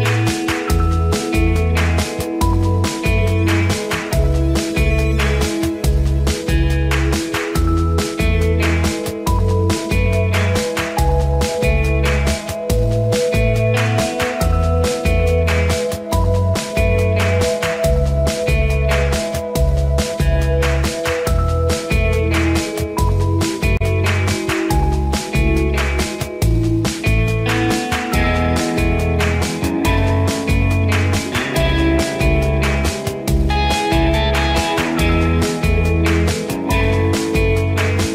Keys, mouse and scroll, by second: 0.5 ctrl+scroll up 1, 0.6 click, 2.1 ctrl+=, 3.5 click, 8.6 right click, 9.4-13.9 drag, 16.9-17.4 scroll up 2, 18.7 click, 20.6 scroll up 1, 22.1 click, 22.4 scroll up 1, 23.6 click, 23.9 scroll up 1, 25.6-25.9 scroll down 2, 28.6 ctrl+-, 30.8 ctrl+click, 31.1 ctrl+-, 32.2 ctrl+-, 32.9 click, 38.0 ctrl+g.